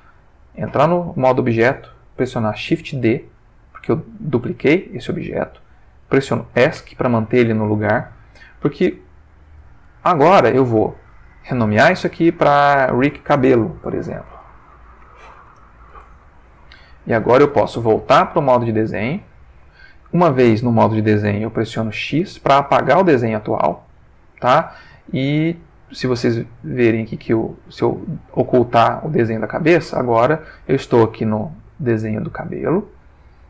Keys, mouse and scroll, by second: 0.4 click, 2.9 shift+d, 6.7 Escape, 9.9 ctrl+middle click, 11.5 click, 12.3 click, 14.2-15.0 typing, 15.4 Return, 17.2 ctrl+middle click, 18.1 ctrl+Tab, 19.2 click, 22.2 x, 22.9 click, 27.1 click, 28.6 click.